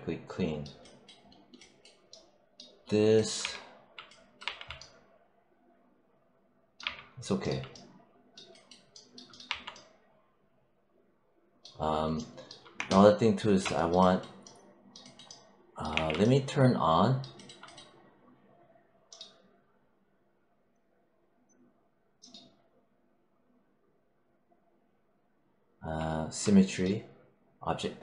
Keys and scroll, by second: 3.3 3, 4.3 1, 6.7 3, 9.3 1, 15.8 w.